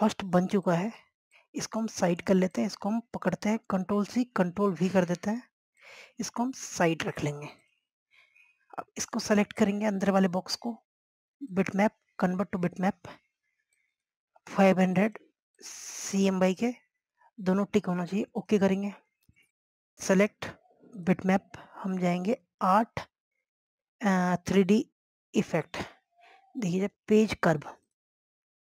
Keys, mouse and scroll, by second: 1.1 scroll down 1, 1.8 click, 6.9 click, 8.7 click, 9.5 scroll up 1, 10.2-28.7 drag.